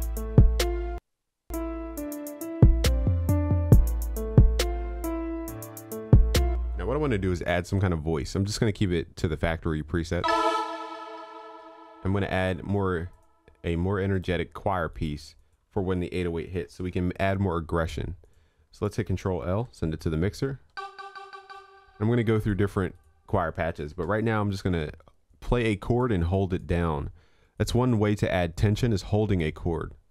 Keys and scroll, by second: 19.9 ctrl+l, 23.9 ctrl+s.